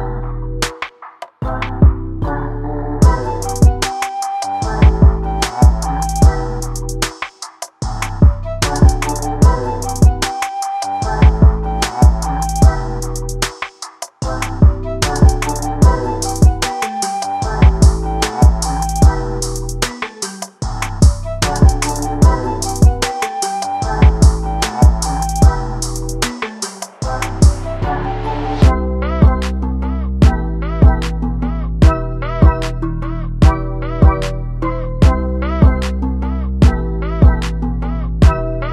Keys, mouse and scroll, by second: 0.0 click, 0.5 s, 1.0 ctrl+z, 1.3 o, 1.6 click, 2.0 middle click, 2.3 middle click, 2.4 shift+click, 2.4 middle click, 2.9 KP_3, 3.1 ctrl+b, 3.4 click, 3.6 s, 3.9-4.5 scroll down 2, 4.1 alt+a, 4.2 Tab, 4.5 click, 4.6 click, 4.7 Tab, 4.8 a, 5.1 Tab, 5.2 scroll down 1, 5.3 click, 5.6 click, 5.7 Tab, 5.8 alt+a, 5.9 /, 6.0 scroll down 1, 6.0 alt+a, 6.2 KP_0, 6.3 z, 7.1 click, 8.7 click, 9.8 scroll down 3, 9.9 shift+middle click, 9.9 scroll up 4, 10.0 click, 10.8 click, 11.5 scroll down 6, 11.7 Delete, 11.8 scroll up 4, 11.9 click, 12.7 click, 12.8 scroll up 2, 12.9 click, 14.0 scroll up 3, 14.1 click, 17.9-18.4 scroll down 1, 18.5 click, 19.5 ctrl+z, 20.3 click, 20.9 scroll down 4, 21.0 click, 21.8 click, 21.9-22.2 scroll down 3, 22.2 click, 22.3 scroll up 2, 22.4 shift+middle click, 22.7 ctrl+b, 23.8 scroll up 6, 23.9 click, 24.6 click, 24.8 scroll down 3, 24.9 click, 25.7-26.1 scroll down 1, 26.1 click, 26.3 click, 26.5 click, 26.8 scroll down 1, 27.1 click, 27.2 scroll up 3, 27.6 shift+middle click, 27.9 click, 28.4 click, 28.6 scroll down 1, 28.7 scroll up 3, 28.8 click, 29.8 click, 30.7 shift+middle click, 30.9 click, 31.1 scroll down 1, 31.2 scroll up 2, 31.3 alt+a, 31.4 shift+middle click, 31.5 click, 32.1 scroll down 2, 32.2 scroll up 1, 32.4 click, 34.0 scroll down 2, 34.3 click, 35.0 scroll down 1, 35.2 click, 35.3 shift+a, 35.5 scroll up 1, 35.8 click, 36.1 scroll down 1, 36.2-37.0 scroll up 3, 37.0 click.